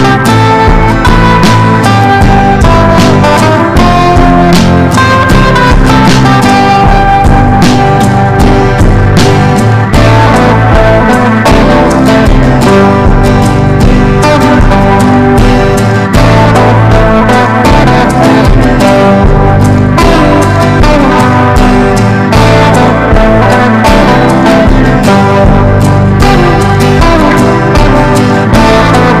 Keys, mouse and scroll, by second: 2.2 F4, 2.9 click, 6.3 F4, 7.0 click, 9.4 F4, 10.1-18.6 drag, 19.1 KP_0, 19.1 KP_1, 19.8-21.8 drag, 22.9 ctrl+b, 23.6-25.4 drag, 26.0 Right, 26.5 Up, 26.6 Up, 26.7 Up, 26.8 Up, 27.5-29.2 drag.